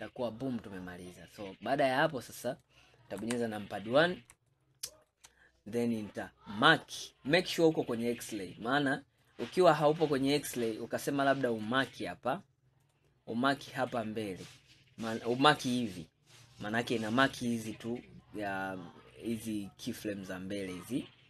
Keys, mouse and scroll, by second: 0.1-1.6 middle drag, 1.6 scroll down 4, 2.1-3.3 middle drag, 3.3 KP_1, 4.6 shift+middle click, 5.5 scroll up 4, 5.8-6.7 scroll down 2, 9.3-10.6 drag, 12.9 click, 13.6 click, 15.7 click, 16.8-19.9 middle drag, 20.9-21.2 middle drag.